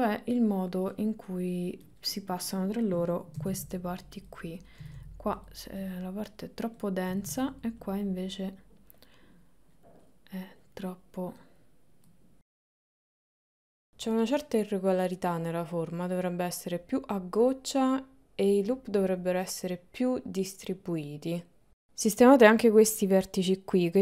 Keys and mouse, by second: 1.0 middle click, 2.1 middle click, 3.4 g, 4.8 g, 5.9 click, 7.9 click, 9.2 middle click, 10.1 middle click, 10.9 middle click, 12.2 click, 13.0 middle click, 13.9 click, 14.2 middle click, 14.8 g, 16.8 g, 17.8 click, 19.2 g, 20.5 g.